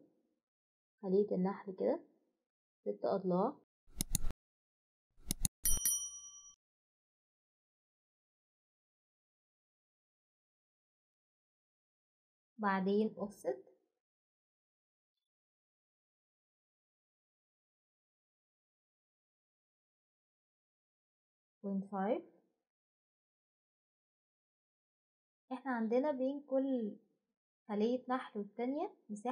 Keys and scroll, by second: 2.1 6, 2.4 Return, 11.1 Return, 11.1 typing, 12.9-13.6 typing, 15.1-16.1 typing, 17.8 BackSpace, 19.2 5.